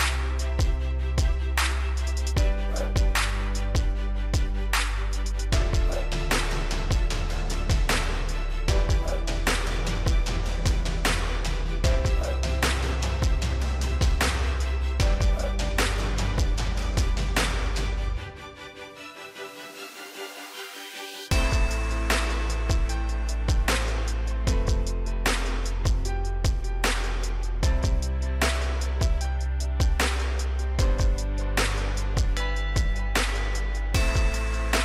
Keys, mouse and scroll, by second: 8.0 right click, 9.1-13.8 drag, 15.9 right click, 16.6 click, 17.4 scroll down 1, 19.3 click, 22.7-24.4 drag, 24.4-25.3 scroll up 1, 25.3 right click, 26.2-29.9 drag, 29.7-30.6 typing, 30.9 Return, 32.5 click, 33.6 right click, 34.3 click.